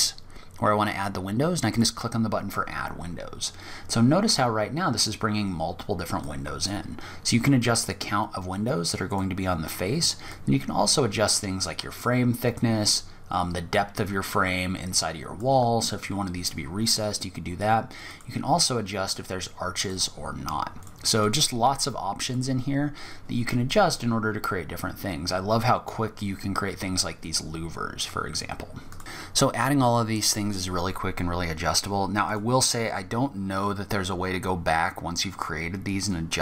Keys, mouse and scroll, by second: 0.9 click, 1.8-2.6 scroll up 1, 2.6 scroll down 1, 2.9 scroll down 1, 5.4 click, 9.5 click, 11.7 click, 17.3 click, 19.0 click, 20.0 click, 20.4 click, 24.5-25.7 scroll up 9, 25.7-26.4 scroll down 7, 27.2 click, 29.0 scroll down 1, 29.9 scroll down 1, 30.3 scroll up 1, 30.9 click, 31.4 click, 34.4-36.4 scroll up 3.